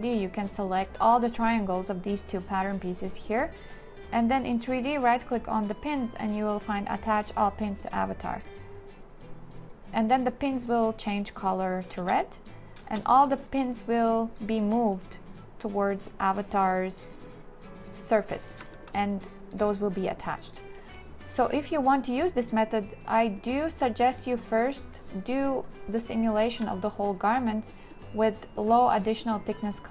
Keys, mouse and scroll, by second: 12.0 space, 18.6 a, 19.0 q.